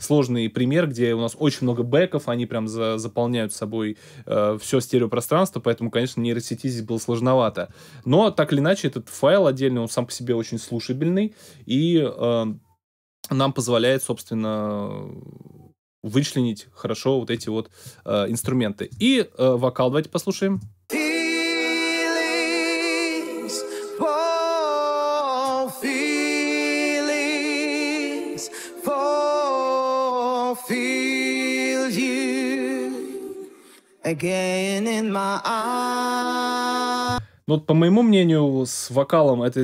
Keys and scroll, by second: 20.5 space, 37.1 space.